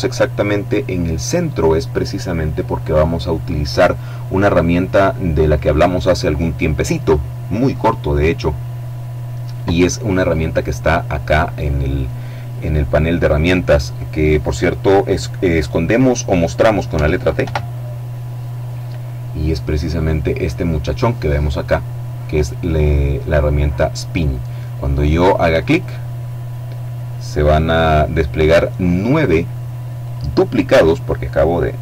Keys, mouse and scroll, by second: 4.7-5.4 scroll up 1, 6.8-7.6 scroll down 2, 16.1 t, 18.5-19.5 scroll up 2, 24.9 click, 29.2 click.